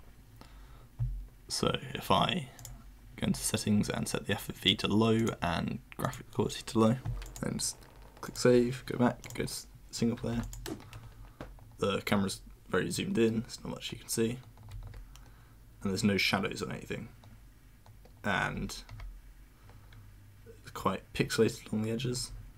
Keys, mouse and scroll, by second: 2.6 click, 4.1-4.6 drag, 5.2 click, 6.0 click, 7.2 click, 8.2 click, 9.2 click, 10.4 click, 14.7 w, 18.4 w, 18.9 w, 22.0 s, 22.3 s.